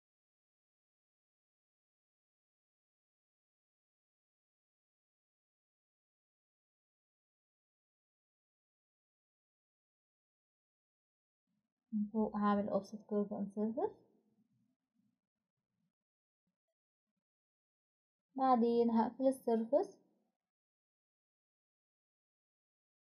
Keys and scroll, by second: 9.9 Escape, 11.4 typing.